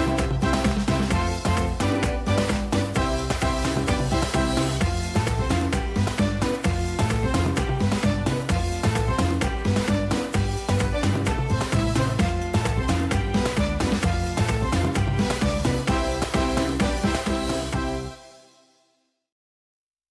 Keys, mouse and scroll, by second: 0.0 ctrl+z, 1.0 ctrl+z.